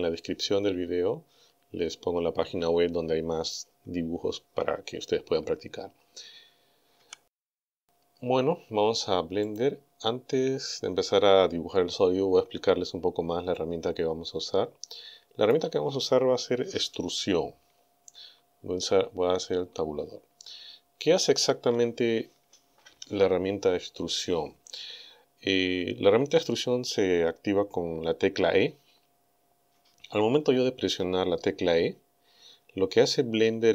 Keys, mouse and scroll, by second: 9.5 click, 12.5-13.0 scroll up 2, 13.5-15.7 middle drag, 19.4 Tab.